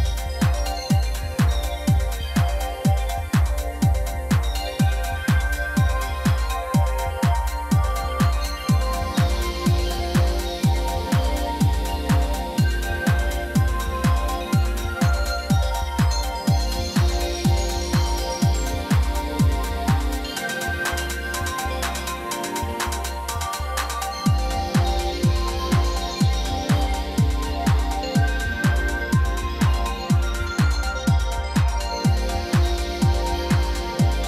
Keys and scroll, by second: 1.0 x, 3.2 r, 4.5 g, 4.7 z, 5.1 alt+a, 12.0 c, 12.1 o, 12.3 c, 12.4 h, 12.7 Return, 15.0 e, 15.6 c, 16.1 a, 16.3 3, 16.4 Return, 18.5 ., 18.6 6, 19.0 Return, 26.4 ctrl+l, 29.1-30.8 typing, 32.5 alt+a.